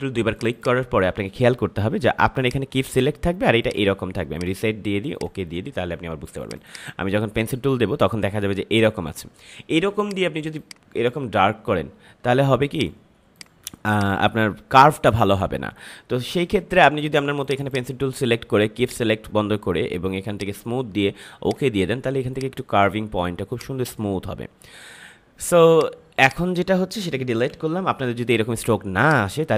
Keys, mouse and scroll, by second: 0.3 click, 9.9-12.7 drag, 16.2 Delete, 17.4-25.6 drag, 27.4 Delete, 29.0 click.